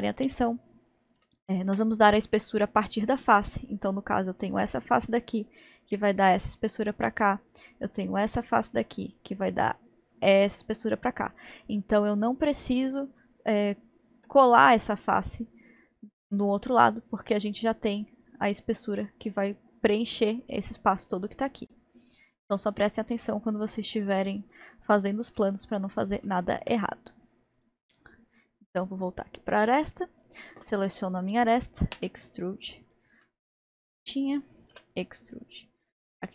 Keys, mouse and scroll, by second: 1.3-4.3 shift+middle drag, 4.3-17.9 drag, 18.1-21.2 drag, 21.2-22.1 scroll down 1, 22.1 scroll down 1, 22.2 click, 22.8-26.9 middle drag, 26.9-27.5 scroll up 1, 27.6 click, 29.2 click, 30.1 click, 31.9 e, 33.2-34.7 middle drag, 34.7 e.